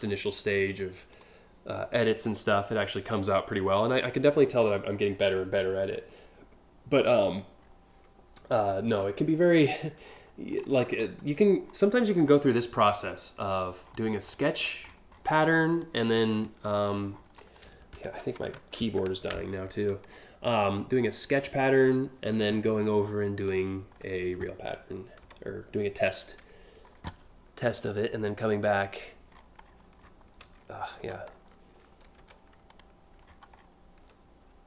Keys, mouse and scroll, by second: 0.7 click, 1.8 click, 4.9 scroll down 1, 5.0 scroll up 1, 5.6 scroll down 1, 6.8-7.4 scroll up 2, 8.2 click, 8.6 scroll up 1, 9.2 alt+scroll up 2, 9.7 scroll down 2, 10.2-10.7 scroll down 2, 11.3 scroll down 1, 11.8 ctrl+scroll down 1, 12.7 click, 13.4 scroll down 3, 13.9-15.1 scroll up 8, 15.3 scroll down 1, 15.8 click, 16.2 scroll down 1, 16.5 scroll up 1, 16.7 scroll down 1, 17.0 scroll up 1, 19.7 alt+scroll down 1, 20.1 scroll up 1, 20.3 scroll down 1, 21.3 click, 23.1 click, 28.9-29.4 scroll up 3, 29.7 scroll down 3, 30.5 scroll up 3, 30.9 scroll down 1, 32.3 click, 32.9-33.4 alt+scroll up 2.